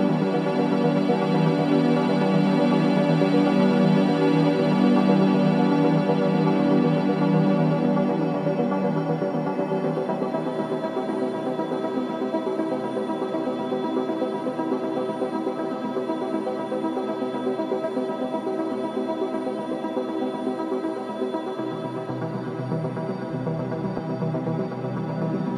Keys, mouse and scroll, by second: 1.9-2.6 scroll down 1, 3.7-5.8 drag, 5.8 scroll up 1, 6.6 click, 7.1 scroll up 1, 7.8 click, 9.3-9.8 scroll down 1, 11.5-17.4 shift+drag, 17.8-18.1 scroll down 1, 19.4-21.4 drag, 21.4-21.9 scroll up 1, 23.0-23.9 typing, 24.3 click, 24.9-25.5 scroll down 1.